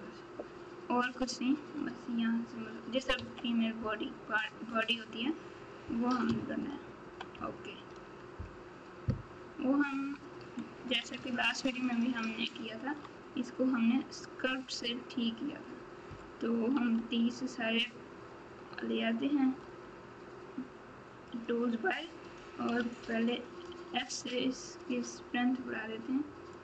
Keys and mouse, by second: 3.1 KP_3, 11.1 ctrl+Tab, 16.9 t, 19.6 g, 21.2 click, 22.7 f, 23.6 f, 26.5 click.